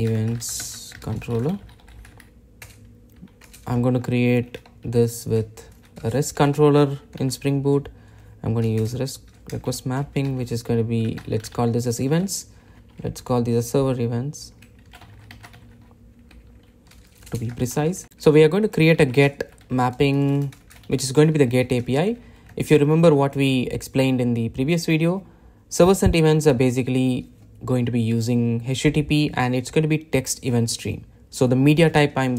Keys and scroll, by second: 6.3 Return, 21.8 Return.